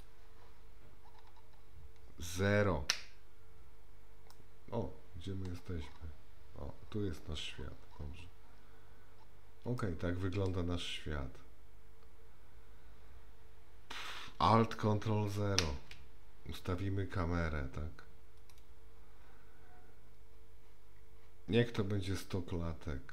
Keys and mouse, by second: 2.9 KP_0, 4.4-5.6 middle drag, 9.8-10.5 shift+middle drag, 15.3 ctrl+a.